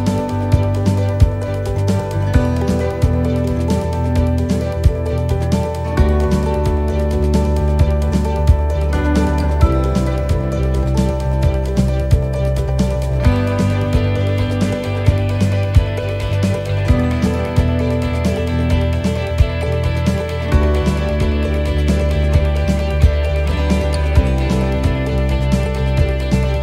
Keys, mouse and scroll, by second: 0.7 shift+middle click, 1.1 middle click, 1.2 shift+middle click, 1.9 shift+middle click, 2.5 middle click, 4.4 shift+middle click, 5.0 middle click, 5.5 shift+middle click, 6.2 middle click, 7.6-8.4 scroll down 4, 8.4 shift+middle click, 8.9-9.7 scroll up 2, 9.2 middle click, 11.1 shift+middle click, 12.0 middle click, 15.7 middle click, 15.9 shift+middle click, 16.3 middle click, 16.8 shift+middle click, 17.3-17.7 scroll up 3, 17.6 middle click, 18.1 shift+middle click, 19.0 scroll down 1, 19.4 shift+middle click, 20.3 middle click, 20.9 shift+middle click, 24.4 middle click, 25.1 shift+middle click, 26.4 middle click.